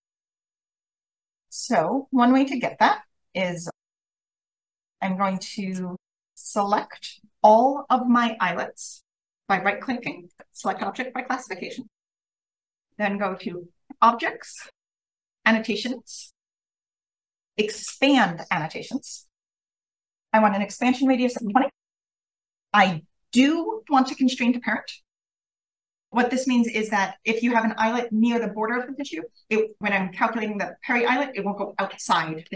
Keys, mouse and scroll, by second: 0.9-3.9 scroll up 1, 3.9 click, 3.9-4.4 scroll up 1, 5.1-6.3 scroll up 1, 6.3 click, 6.3-9.7 scroll up 1, 6.8 right click, 10.2 click, 19.8 0.